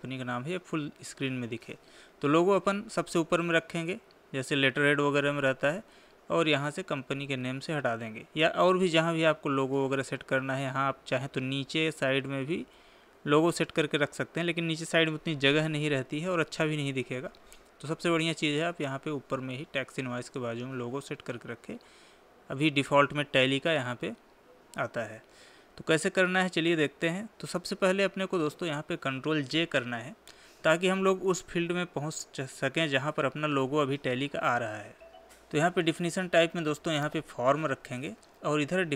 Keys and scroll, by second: 30.0 ctrl+j, 38.2 Tab.